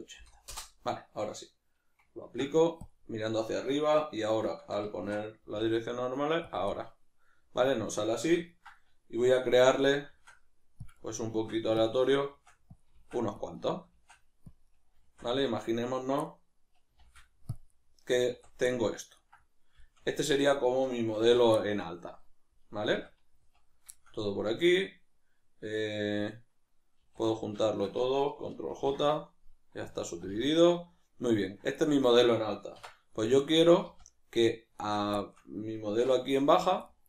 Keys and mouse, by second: 2.2 ctrl+a, 5.0 shift+Tab, 6.7-10.9 middle drag, 10.1 shift+d, 10.9 click, 11.0 middle click, 11.3 shift+d, 11.8 click, 12.0 middle click, 12.3 shift+d, 12.8 click, 12.9 shift+d, 13.5 click, 13.6 middle click, 13.9 shift+d, 14.5 click, 14.7-17.6 middle drag, 15.0 d, 17.0 shift+d, 17.6 click, 17.7-20.4 middle drag, 18.3 a, 20.4 right click, 21.2 ctrl+2, 21.6-25.8 middle drag, 23.0 a, 25.8 right click, 27.5 shift+right click, 29.1 ctrl+j, 29.1-31.4 middle drag, 30.1 a, 31.4 right click, 31.9-34.7 middle drag, 32.7 \, 33.8 z, 34.7 shift+right click, 35.2-37.0 shift+middle drag, 35.9 \.